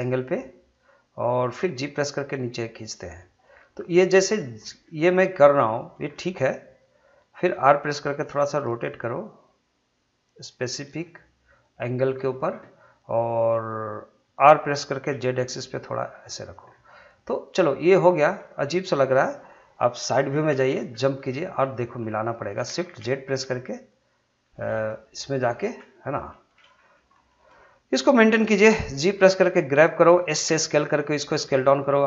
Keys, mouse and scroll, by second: 1.8 g, 3.0 click, 3.5 scroll down 1, 3.8 middle click, 4.6 scroll up 1, 4.8-6.1 middle drag, 6.1-7.8 middle drag, 7.8 r, 10.5 click, 11.0-14.4 middle drag, 14.4 r, 16.4 click, 16.7 scroll down 1, 16.9 middle click, 18.1 scroll up 1, 18.4 middle click, 20.9-21.3 scroll up 1, 21.6 shift+middle click, 22.9 shift+z, 23.3 middle click, 25.7 scroll up 1, 26.1 shift+middle click, 26.5 scroll up 1, 26.8 shift+middle click, 28.9 g, 30.0 click, 30.4 s.